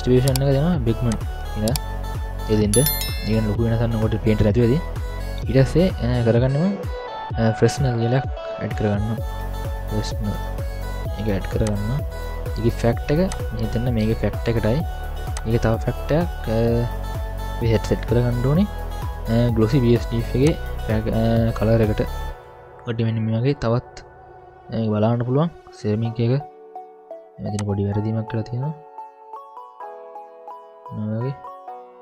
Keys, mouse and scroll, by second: 2.2-2.5 scroll up 2, 2.7-3.1 scroll down 3, 3.1 middle click, 5.9 middle click, 6.9 middle click, 7.9 ctrl+alt+a, 13.3-14.2 drag, 16.3-17.0 drag, 20.4-22.5 drag, 22.6 middle click, 22.6 scroll down 1, 23.5-26.3 middle drag, 27.5-30.2 drag, 30.8-31.3 scroll down 4, 31.2 scroll up 1, 31.3-32.0 middle drag.